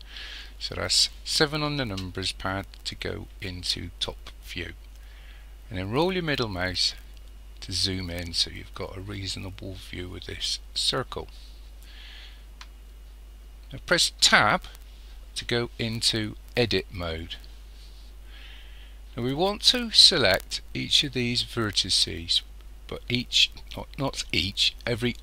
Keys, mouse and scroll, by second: 5.8 scroll up 1, 14.2 Tab.